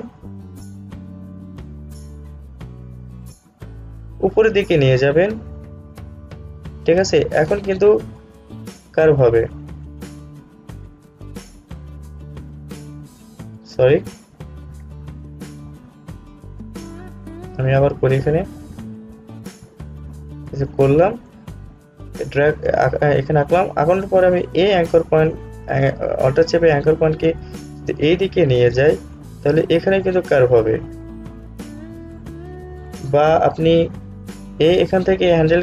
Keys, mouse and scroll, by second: 14.3 click, 14.5 ctrl+z, 18.9-27.1 drag, 27.1-33.2 alt+drag, 33.2 ctrl+z.